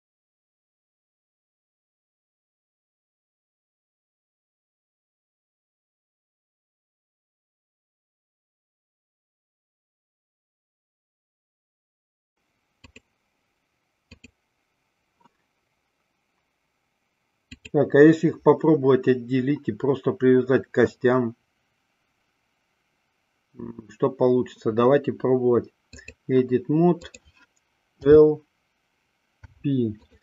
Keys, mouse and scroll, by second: 0.6 r, 1.5-2.0 middle drag, 2.0-2.8 middle drag, 3.0-3.3 middle drag, 4.2 ctrl+z, 4.4 ctrl+z, 4.8 ctrl+z, 5.1 ctrl+z, 5.3 ctrl+z, 5.5 ctrl+z, 5.7 ctrl+z, 5.9 ctrl+z, 6.1 ctrl+z, 6.3 ctrl+z, 6.5 ctrl+z, 6.7 ctrl+z, 6.9 ctrl+z, 7.1 ctrl+z, 7.3 ctrl+z, 7.5 ctrl+z, 7.7 ctrl+z, 7.8 ctrl+z, 8.3 ctrl+z, 8.7 KP_1, 9.0 KP_3, 10.7 click, 11.1 middle click, 14.3 click, 17.7-26.5 drag, 27.2 click, 28.3 l, 29.5 p.